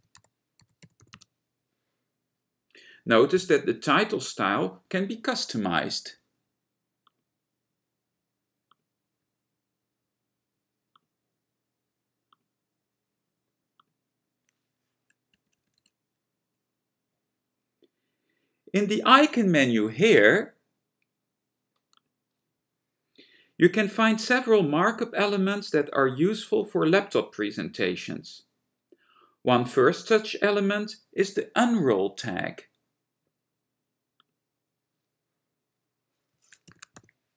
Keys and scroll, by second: 0.0-1.2 typing, 15.3 Return, 15.8 Return, 36.8-37.3 typing.